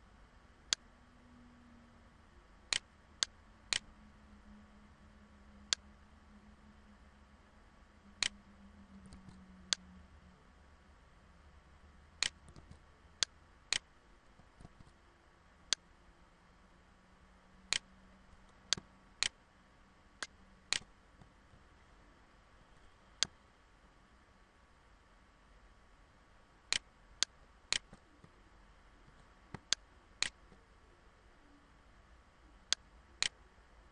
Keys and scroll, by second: 8.7 ctrl+z, 14.3 ctrl+z, 21.1 ctrl+-, 27.7 ctrl+=, 28.3 ctrl+=.